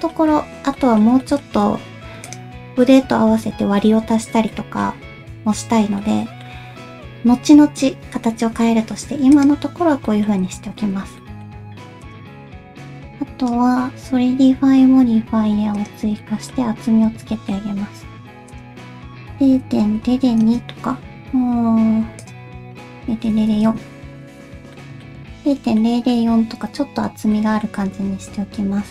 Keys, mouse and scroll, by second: 0.5 alt+z, 0.7 middle click, 1.2 shift+middle click, 1.9 q, 4.5 middle click, 6.0 middle click, 10.1 middle click, 10.6 alt+z, 11.2 middle click, 13.7-16.2 drag, 16.2 middle click, 17.3 shift+middle click, 20.1-24.7 drag, 20.1 0, 24.7 middle click, 25.8 middle click, 27.3 middle click.